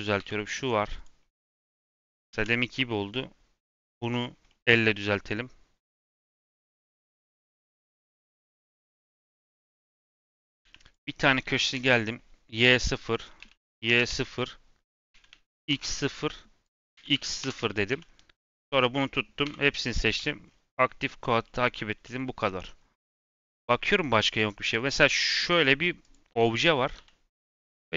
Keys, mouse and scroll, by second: 0.1 l, 0.9 click, 1.6-2.2 scroll down 1, 2.2 ctrl+z, 3.8 middle click, 4.1 scroll up 2, 4.4 middle click, 4.9 r, 7.0 g, 7.6 scroll up 1, 7.9 middle click, 8.0 scroll down 1, 8.1-8.8 scroll up 1, 8.8 r, 10.6 2, 10.8 click, 11.1 s, 13.0 click, 13.3 s, 14.7 click, 15.0 s, 16.6 click, 16.9 s, 17.4 KP_3, 17.8 3, 18.5 click, 19.4 l, 19.6 right click, 20.4-21.4 scroll down 6, 21.4-22.7 middle drag, 22.7-23.2 scroll up 5, 23.2 middle click, 23.5 scroll down 2, 23.8 middle click, 24.2 click, 24.5 click, 24.9 3, 25.6-25.9 scroll down 1, 25.9 click, 26.2 l, 26.5-26.9 scroll down 5, 26.9 g.